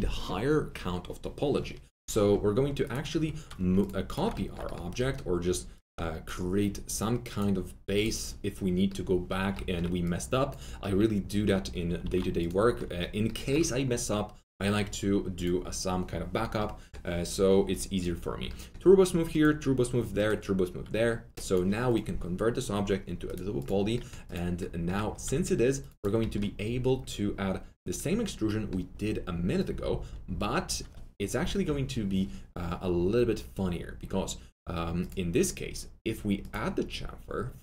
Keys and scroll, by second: 12.0 alt+q, 25.2 alt+2.